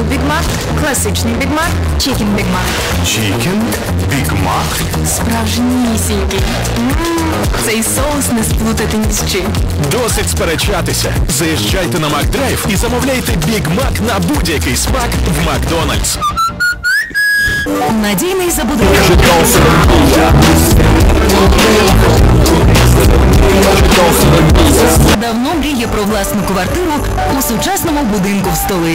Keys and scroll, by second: 25.1 Page_Down.